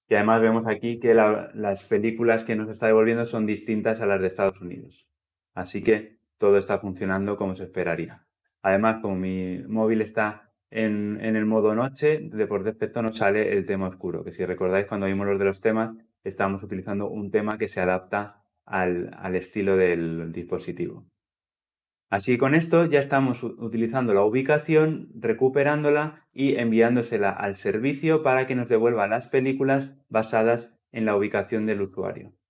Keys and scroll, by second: 23.4 ctrl+F2.